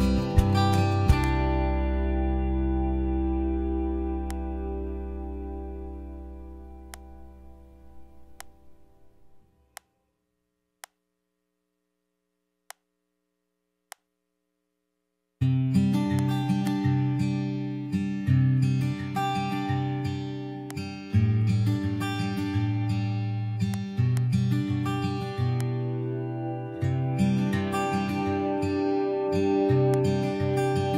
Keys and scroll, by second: 21.7 super+0.